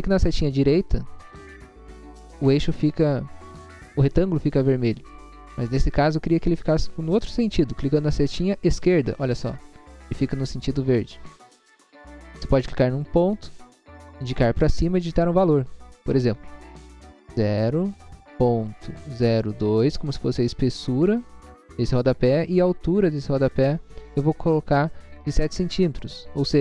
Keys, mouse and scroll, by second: 0.3 Right, 9.1 Left, 12.7 click, 17.6 0, 19.1-19.7 typing.